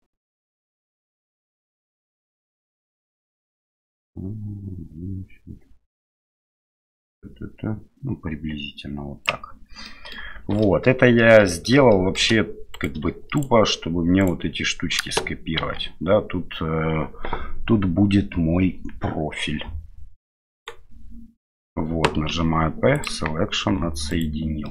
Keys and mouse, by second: 0.6-9.3 drag, 9.9 middle click, 10.3 shift+z, 10.6 middle click, 11.5 middle click, 11.9 middle click, 12.7 right click, 13.4 shift+right click, 14.2 shift+right click, 15.6 shift+d, 22.3 p, 23.6 Tab, 24.1 right click, 24.6-24.7 middle drag.